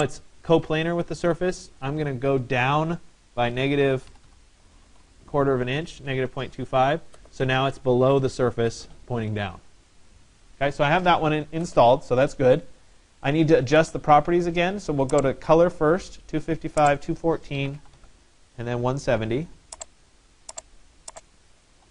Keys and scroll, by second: 3.0-4.7 typing, 3.8 Delete, 4.9 Return, 17.2-18.5 typing, 21.8-21.9 typing.